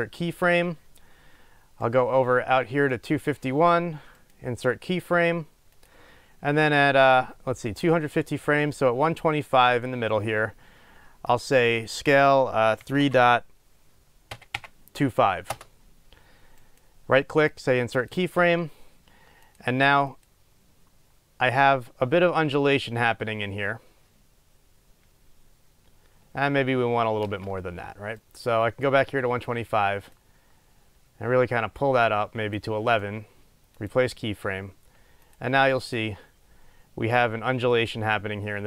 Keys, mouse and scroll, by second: 15.7 Return, 15.7-18.2 drag, 18.2-19.7 right drag, 19.7 click, 20.3-28.3 drag, 27.4 space, 28.3 right click, 30.6-33.9 drag, 33.9-35.4 right drag, 35.4 click, 36.1 click.